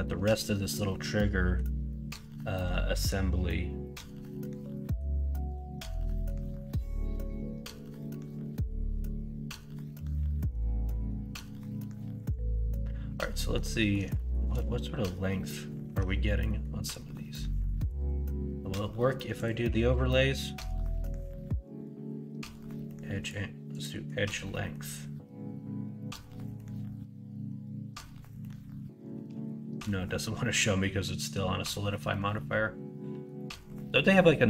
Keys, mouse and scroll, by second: 0.0-1.5 middle drag, 1.9 middle click, 11.0 middle click, 12.6 middle click, 13.3 middle click, 13.7 middle click, 14.1 shift+middle drag, 15.8 Tab, 16.4 middle click, 24.2-28.4 middle drag, 32.4 middle click.